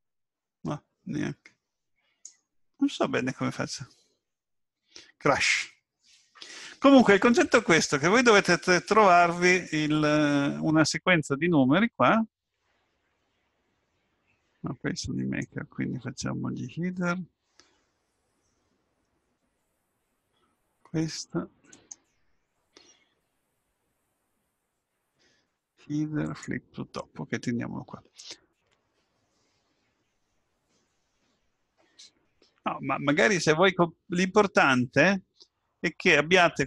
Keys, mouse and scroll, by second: 1.0 click, 15.2 right click, 21.7 right click.